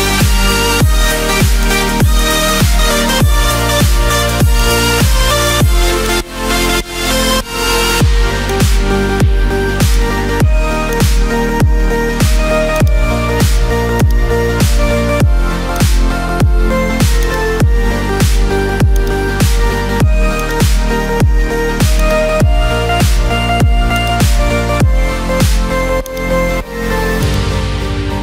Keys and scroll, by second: 0.4 ctrl+z, 3.1 Return.